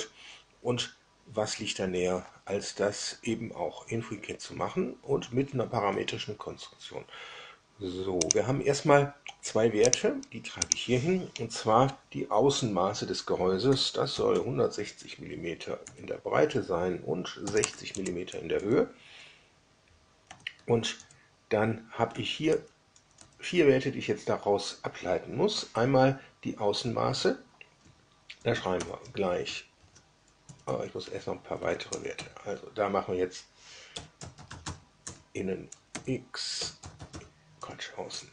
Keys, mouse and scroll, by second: 8.2 click, 9.8 drag, 10.6 drag, 13.4-14.7 typing, 15.8 Down, 17.4 KP_6, 17.6 KP_0, 17.9 KP_Enter, 18.5 Up, 20.2 Down, 20.5 Left, 20.9 Up, 22.1 Down, 22.4 Down, 22.9 Up, 23.1 Up, 28.7 shift+0, 29.7 shift+c, 30.4 BackSpace, 30.6 BackSpace, 31.0 Escape, 31.5 Down, 31.8 Up, 32.1 Left, 33.6-37.6 typing, 35.8 Down, 38.2 Up.